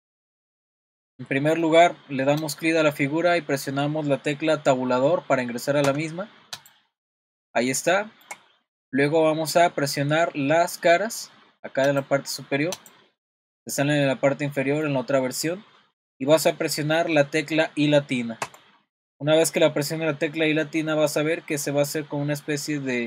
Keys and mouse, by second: 1.6-2.4 middle drag, 2.4 click, 5.9 Tab, 6.5 click, 7.1 middle click, 7.9 middle click, 11.9 click, 12.9 click, 14.5 middle click.